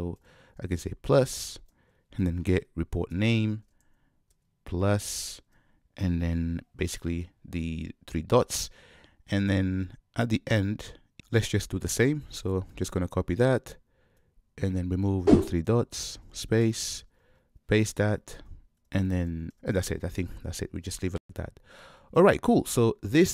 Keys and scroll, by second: 3.2 Return, 12.9 super+c, 17.3 super+v.